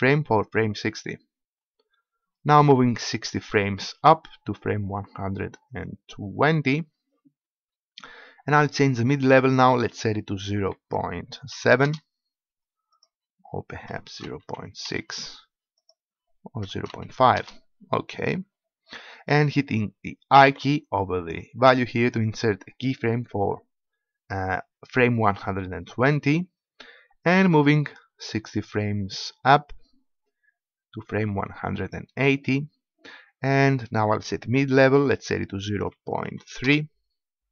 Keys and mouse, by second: 3.2 click, 3.5-5.1 drag, 9.3-11.8 drag, 12.9-14.9 drag, 17.3-20.4 drag, 20.4 i, 25.3-27.7 drag, 31.0 middle click, 34.7-36.6 drag.